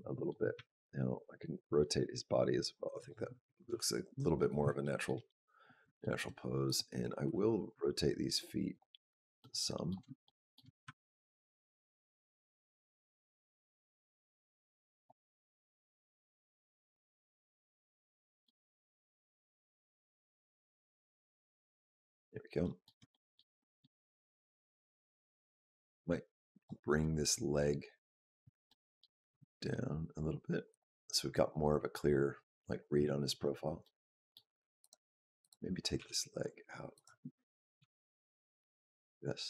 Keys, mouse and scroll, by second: 0.4 r, 4.0 r, 4.6 shift+middle click, 5.5 scroll up 2, 5.9 shift+middle click, 6.5 click, 7.1 r, 9.2 middle click, 10.1 shift+middle click, 10.7 r, 15.6 click, 16.9 shift+middle click, 17.3 middle click, 18.6 r, 22.4 shift+middle click, 23.4 middle click, 24.1 middle click, 25.4 click, 26.4 click, 26.8 middle click, 28.0-28.7 scroll down 2, 28.5 middle click, 29.2 g, 33.7 middle click, 34.6 click, 35.2 click, 35.8 g, 37.6 r.